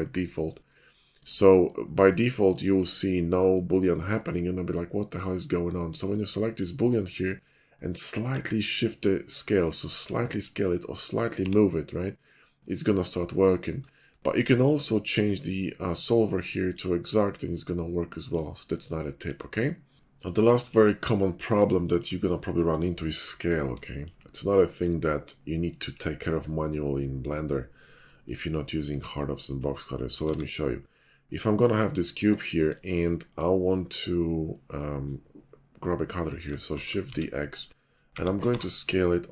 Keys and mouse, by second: 1.0 shift+middle drag, 2.7 middle click, 5.9 click, 6.5 click, 8.2 s, 9.7 click, 9.9 s, 10.6 click, 11.4 g, 12.0 click, 13.0-13.6 drag, 13.6-16.7 shift+middle drag, 16.7 click, 16.8-17.4 middle drag, 17.5-18.3 middle drag, 18.7-19.3 middle drag, 19.5 shift+middle drag, 21.6-23.7 shift+middle drag, 30.2 shift+a, 33.5-34.7 middle drag, 36.7 shift+d, 38.1 s.